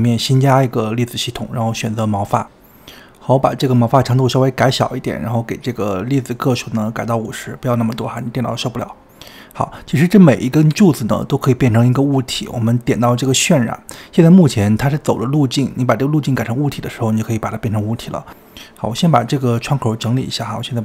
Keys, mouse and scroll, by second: 0.4 shift+middle click, 1.3-13.5 drag, 13.5-15.8 middle drag, 15.8-19.6 drag, 20.7-20.8 drag.